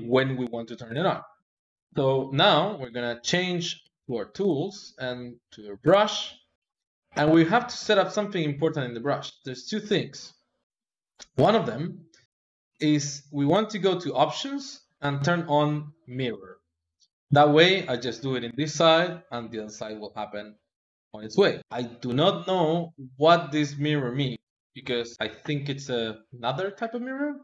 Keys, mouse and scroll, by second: 3.8 click, 8.0-9.0 middle drag, 9.0-10.5 drag, 10.5-11.5 middle drag, 11.5-13.5 drag, 13.5-16.0 middle drag, 16.0 click, 20.4-22.6 drag.